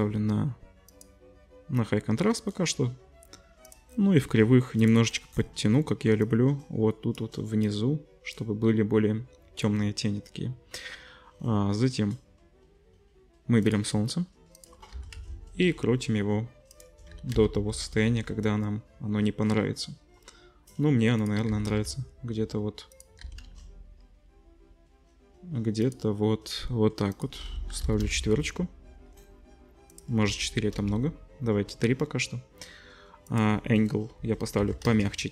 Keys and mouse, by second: 3.7-4.9 drag, 13.7 right click, 14.6-16.8 right drag, 14.9 r, 16.8-17.9 middle drag, 17.1 r, 21.5 r, 23.2 r, 23.7-27.2 middle drag, 27.2-35.3 drag.